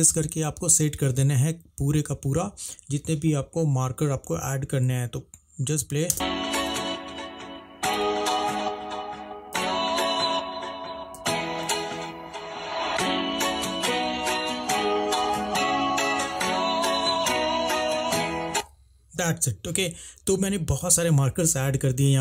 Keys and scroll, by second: 6.2 space, 6.7 m, 13.6-18.7 typing.